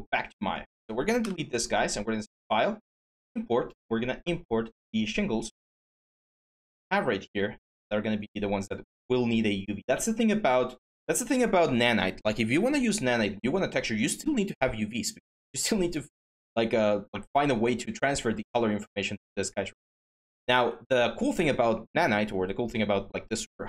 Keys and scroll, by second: 1.0 Delete, 5.0 Delete.